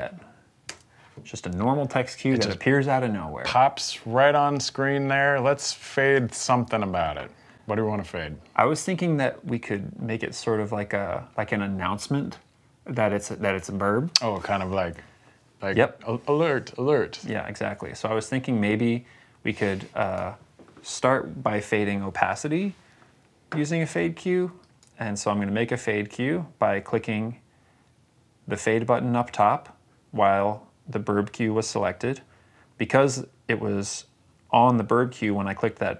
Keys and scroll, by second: 0.5 space.